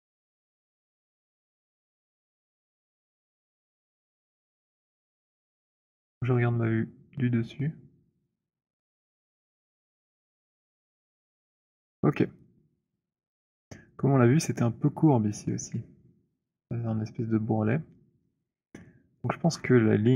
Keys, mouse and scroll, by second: 0.1-2.5 c, 3.3-10.7 c, 10.9 middle click, 10.9 c, 11.5 middle click, 11.6-13.0 scroll, 13.6 alt+click, 15.3-15.9 scroll, 19.3-19.9 scroll, 19.9-20.1 scroll.